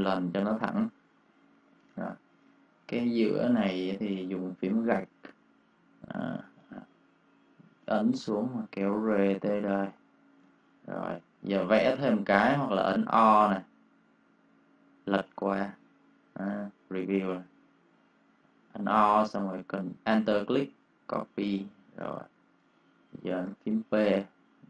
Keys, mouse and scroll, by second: 0.4 space, 0.5 click, 1.2 ctrl+click, 1.8 click, 2.5 ctrl+click, 4.5 \, 5.6 click, 7.4 click, 10.3 space, 10.5 click, 12.8 o, 14.9 alt+click, 20.1 click, 20.9 click, 21.5 v, 21.7 click, 21.9 space, 22.0 click, 23.4 p.